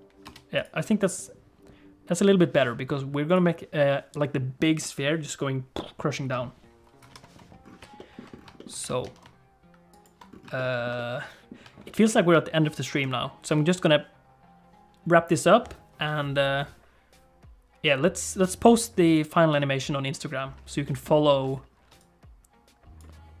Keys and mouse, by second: 0.2 space, 0.6 click, 3.3 click, 7.0 KP_1, 8.0 middle click, 8.6 shift+middle click, 8.8 g, 10.6 shift+middle click, 11.0 middle click, 11.8 shift+middle click, 13.0 KP_1, 20.9 shift+middle click, 21.9-23.4 typing, 22.0-23.0 drag.